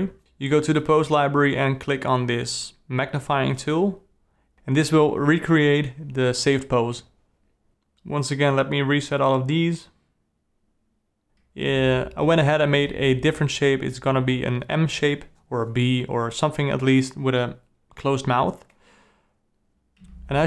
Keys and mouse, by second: 2.1 click, 4.4 click, 5.6-7.1 drag, 7.1 d, 7.6 d, 7.7 alt+r, 7.8 alt+g, 8.4 alt+r, 8.6 alt+g, 8.7 alt+g, 9.0 alt+click, 9.0 alt+middle click, 9.1 alt+click, 9.2 alt+middle click, 9.5 alt+r, 9.6 alt+r, 9.6 alt+g, 9.7 alt+s, 11.2 shift+F12, 11.9 shift+Left, 13.6 Right, 16.6 Left, 17.5 i, 18.7 Right, 19.4-20.4 drag.